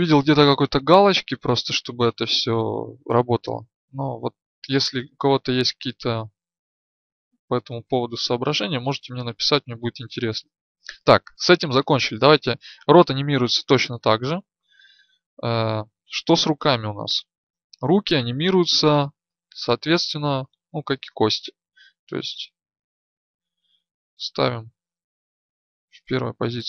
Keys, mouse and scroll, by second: 1.3 Left, 2.1-3.3 Left, 3.9 Left, 5.0 Left, 5.6 Left, 6.6-7.1 Left, 7.6 Left, 7.9 Left, 9.0-9.8 Right, 10.1 Right, 22.0-24.1 right drag, 24.1-24.7 Left, 25.5 Left.